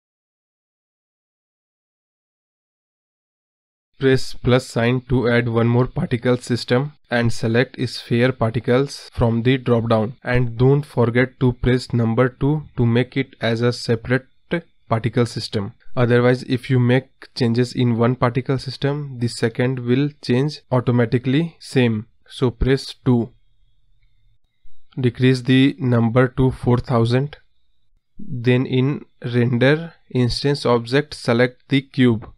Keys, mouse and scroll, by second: 0.2 scroll down 1, 0.3-0.7 scroll up 1, 0.7 click, 1.1 space, 4.5 scroll down 4, 4.7-5.9 scroll up 16, 5.9-7.6 drag, 7.9 drag, 22.8-23.3 drag, 23.3-23.7 scroll down 3, 25.5-27.0 drag, 29.1-29.9 scroll down 8, 29.9 scroll up 1, 30.2 scroll down 1, 31.2-31.8 scroll down 2.